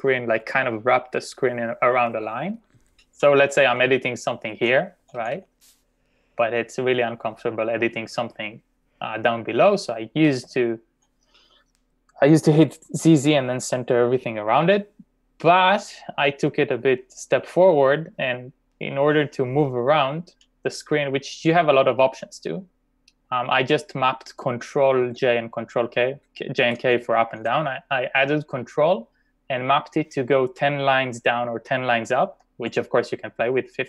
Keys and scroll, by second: 4.0-4.4 typing, 10.1-10.8 typing, 25.9-27.2 typing.